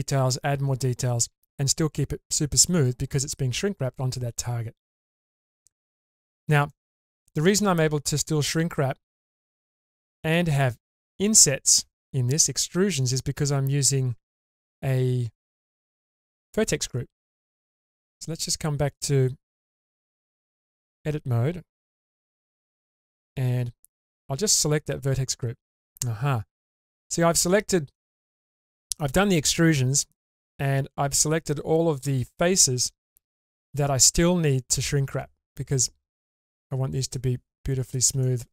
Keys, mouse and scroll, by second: 4.5-5.4 scroll down 2, 4.8-5.4 middle drag, 5.6 shift+middle drag, 6.1-6.5 middle drag, 6.7-7.1 shift+middle drag, 8.6-9.0 scroll up 2, 9.3 shift+space, 9.9-10.3 middle drag, 10.5 scroll up 1, 11.5-12.1 middle drag, 12.4-13.2 middle drag, 15.9 click, 18.9 click, 19.7 Tab, 22.7 3, 25.1 click, 26.1-26.7 scroll down 1, 26.7-28.0 middle drag, 26.7-28.0 scroll down 2, 28.1 shift+middle drag, 28.6-29.0 middle drag, 29.7-31.5 middle drag, 31.9-32.7 scroll up 3, 32.5-38.0 middle drag, 38.2 shift+middle click.